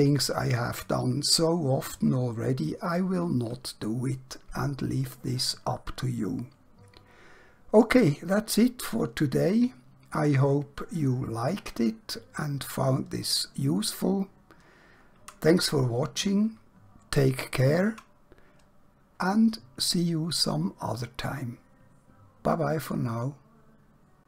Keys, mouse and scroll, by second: 15.6 shift+Num_Lock.